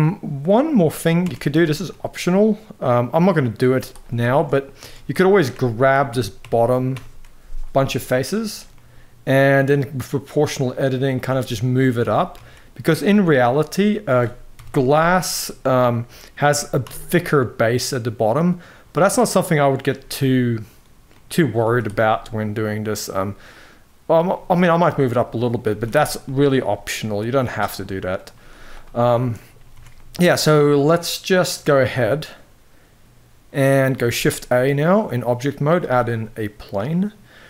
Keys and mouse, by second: 0.2 click, 0.9 Tab, 1.2 z, 2.8 middle click, 3.4 z, 4.0 shift+middle click, 4.5 alt+a, 5.6 ctrl+KP_Add, 5.8 ctrl+KP_Add, 6.1 ctrl+KP_Add, 6.9 ctrl+KP_Add, 8.0 click, 8.4 middle click, 10.0-10.9 drag, 11.4 middle click, 11.7 g, 14.3 KP_1, 14.5 z, 16.2 g, 20.8 middle click, 21.3 z, 21.8 middle click, 24.0-25.4 middle drag, 25.9 middle drag, 25.9 z, 26.7 middle drag, 27.9 click, 28.2 z, 28.8 shift+middle click, 29.4 Tab, 29.7-30.2 middle drag, 31.6-33.6 middle drag, 33.8 shift+a, 35.8-36.8 middle drag, 37.2 s.